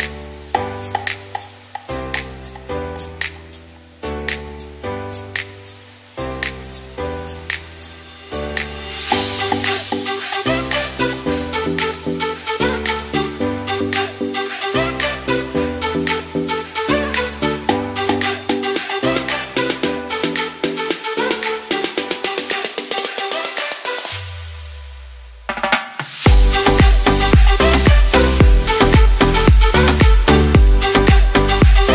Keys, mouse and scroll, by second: 5.4 ctrl+b, 8.6 g, 8.8 z, 9.6 s, 11.4 g, 13.0 g, 14.3-19.3 typing, 22.7 shift+d, 24.1 shift+d, 24.6 g, 25.3 z, 26.3 click, 27.0 g, 27.3 x, 27.9 click.